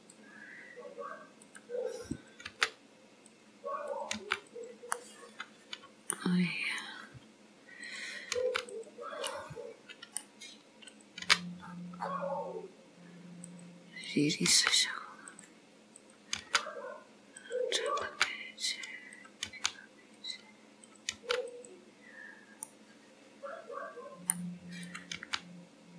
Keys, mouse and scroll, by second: 0.4-1.4 scroll down 3, 1.4 click, 1.4 scroll down 1, 2.2 click, 2.5 g, 4.0 click, 4.3 g, 5.1 middle click, 6.5 scroll up 4, 7.9 click, 8.5 g, 9.4 middle click, 11.0 click, 11.3 g, 14.1 click, 14.6 g, 16.1 click, 16.5 g, 17.9 click, 18.1 g, 19.2 click, 19.5 g, 21.0 click, 21.2 g, 22.7 middle click, 25.0 click, 25.2 g.